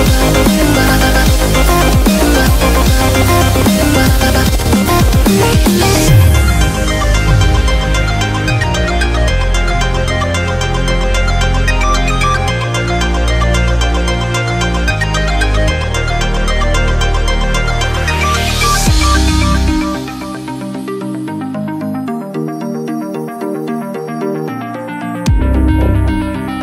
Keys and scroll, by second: 0.2 super+-, 4.8 super+=, 5.2 super+=, 6.3 super+=, 8.3-10.8 typing, 19.7-20.0 typing.